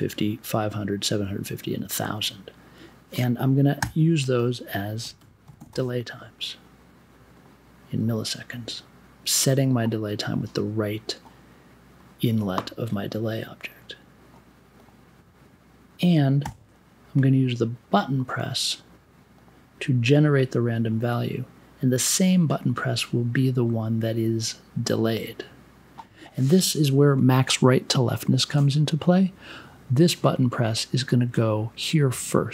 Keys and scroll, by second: 3.8-6.1 typing, 16.4 b.